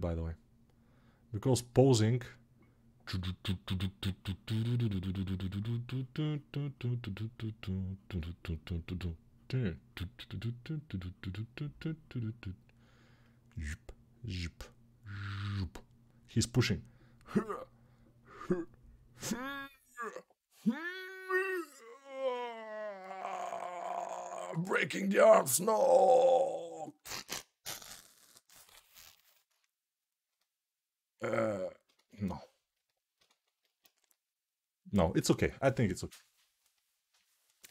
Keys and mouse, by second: 31.8-37.7 drag, 33.3 ctrl+z.